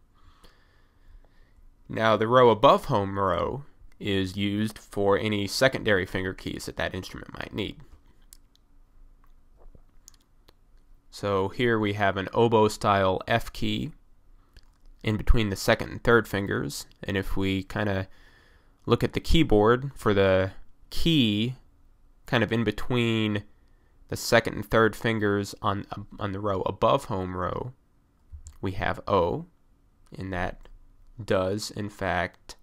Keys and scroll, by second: 28.4 o.